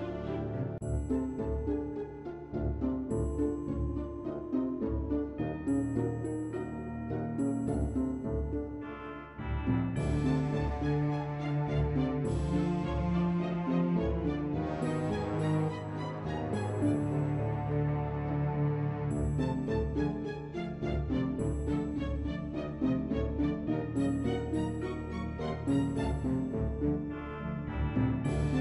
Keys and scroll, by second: 26.5 ctrl+Delete.